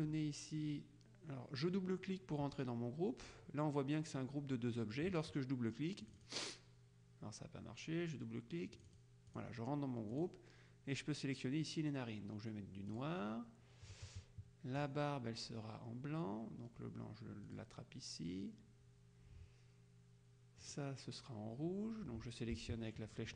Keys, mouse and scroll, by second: 0.0 click, 6.1 click, 8.9 click, 10.2 click, 13.0 click, 14.9 click, 17.5 click, 20.7 click.